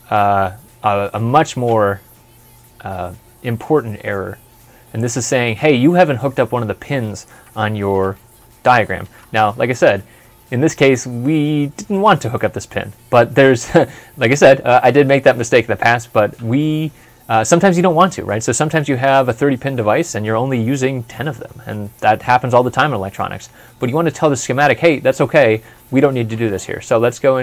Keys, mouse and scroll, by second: 10.1 ctrl+s, 10.1 ctrl+F11, 25.4 ctrl+F12.